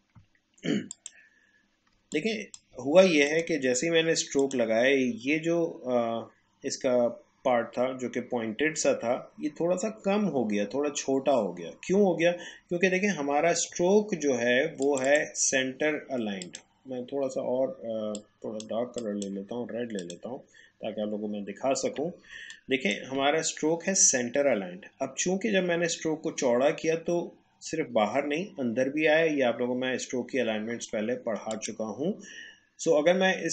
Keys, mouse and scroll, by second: 0.9 click, 2.0 space, 2.1 click, 2.4 space, 3.2 click, 6.6 click, 14.8 click, 21.2 alt+scroll up 1, 22.3 space, 22.5 click, 22.8 space, 31.5 click.